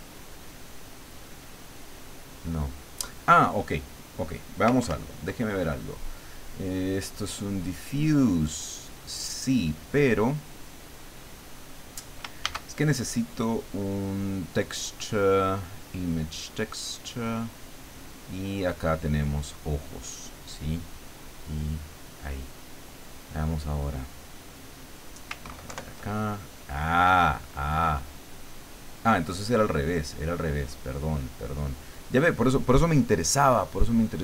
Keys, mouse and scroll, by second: 4.3 click, 4.8 ctrl+Left, 7.8-10.0 drag, 10.1-11.5 middle drag, 12.4 shift+a, 15.8 click, 17.4 click, 18.2 click, 19.3 click, 20.6-21.9 drag, 25.7 ctrl+Right, 28.0 click, 30.9 click.